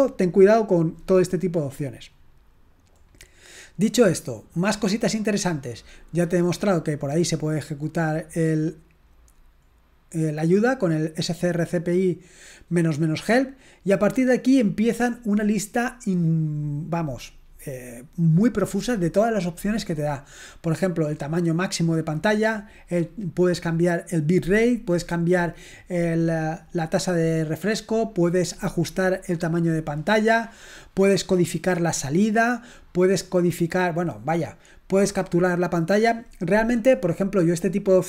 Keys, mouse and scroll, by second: 3.1-5.6 scroll down 2, 8.3-10.6 scroll down 3, 13.2-14.2 scroll down 1, 21.7-22.5 scroll down 1, 24.7-25.5 scroll down 1, 28.2-28.6 scroll down 2, 30.1-31.3 scroll down 2, 32.7-33.3 scroll down 1.